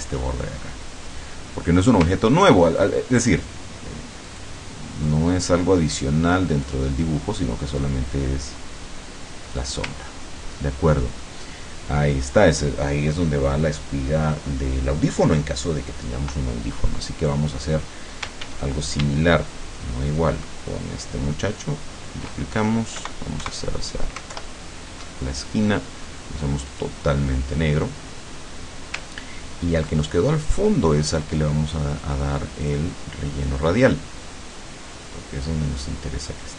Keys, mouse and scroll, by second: 2.3-3.0 ctrl+scroll up 4, 4.3 click, 5.1-6.9 drag, 7.9-9.8 drag, 10.1-10.7 ctrl+scroll down 2, 11.3 ctrl+middle click, 17.3 click, 18.5 ctrl+d, 20.2-22.3 ctrl+shift+drag, 23.0 Right, 24.4 alt+Left, 26.8 click, 29.4-29.8 ctrl+scroll up 2, 30.5 click, 32.7 click, 35.5-36.5 drag.